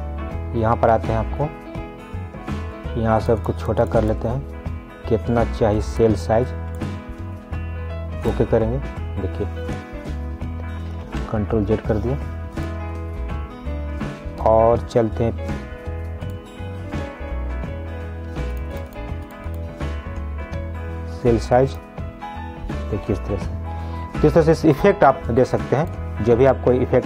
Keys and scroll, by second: 11.3 ctrl+z, 24.4 ctrl+z.